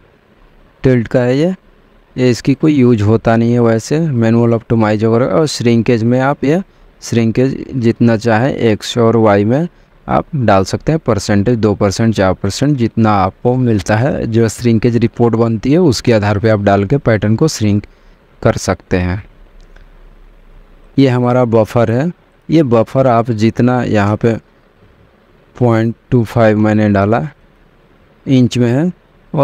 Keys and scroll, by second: 25.5-26.8 typing.